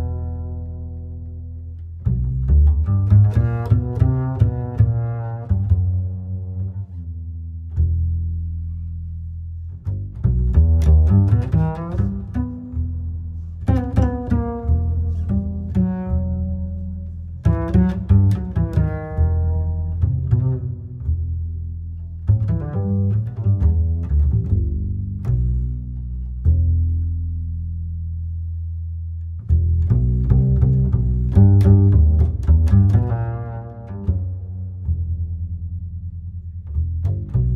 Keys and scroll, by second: 1.3 j, 3.5 Home, 8.8 space, 16.6 j, 19.5 Home, 21.1 Return, 29.0 Down, 31.2 KP_5, 32.9 Return.